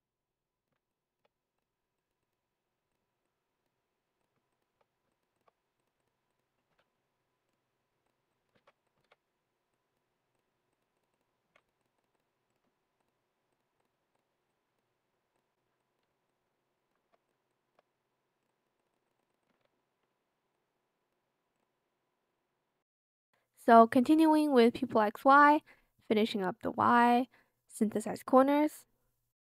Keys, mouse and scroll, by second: 4.7 shift+click, 5.1 shift+click, 8.5 ctrl+shift+c, 9.0 ctrl+shift+v, 11.4 ctrl+z, 15.5 ctrl+z, 16.2 alt+click, 17.4 shift+click, 19.6 Escape, 24.2 shift+click, 25.9 shift+click.